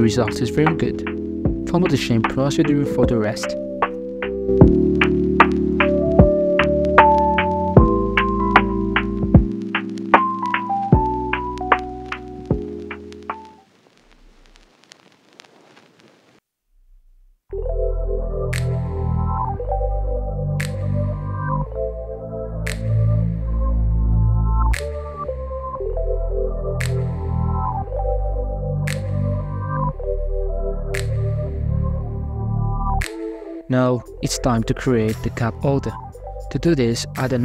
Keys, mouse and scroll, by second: 2.5-2.8 scroll up 2, 2.8 ctrl+r, 4.8 middle click, 5.2 scroll up 1, 5.7 alt+shift+right click, 6.3-7.0 middle drag, 7.0 w, 8.7-9.3 middle drag, 9.3 scroll down 4, 9.4-10.6 shift+middle drag, 10.6-11.2 scroll up 6, 11.2-11.7 shift+middle drag, 11.7 Tab, 12.3 g, 12.7 g, 13.4 ctrl+r, 16.7 Tab, 17.0 w, 18.5-19.5 middle drag, 19.5 Tab, 20.1 alt+right click, 20.6 g, 22.9 g, 24.2 Tab, 24.6-25.2 scroll down 6, 25.2-26.1 middle drag, 26.1 Tab, 26.2 alt+right click, 26.9 alt+shift+right click, 27.5 alt+shift+right click, 28.3 alt+s, 30.2 Tab, 30.4 scroll down 5, 30.7-31.5 middle drag, 31.5 right click, 32.2 h, 33.2 shift+middle drag, 34.5 scroll down 2, 35.1-36.2 drag, 36.7 scroll down 1, 36.9-37.4 middle drag.